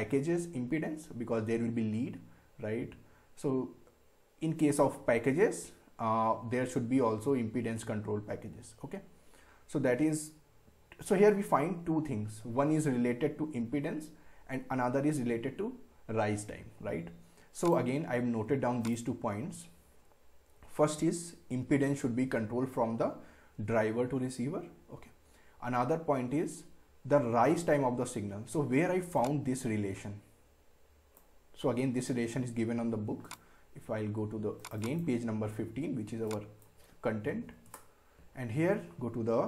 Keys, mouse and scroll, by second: 10.6 scroll up 1, 12.9 scroll up 1, 17.6 click, 29.2-39.0 drag.